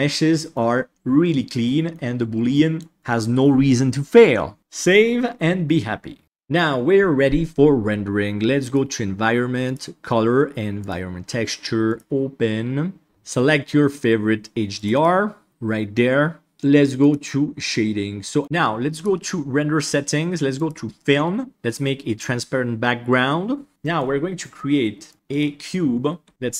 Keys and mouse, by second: 1.2-1.9 middle drag, 2.5 middle drag, 4.6 ctrl+s, 9.7-10.8 drag, 11.8 click, 20.6 click, 23.7 middle drag, 25.1-26.5 drag.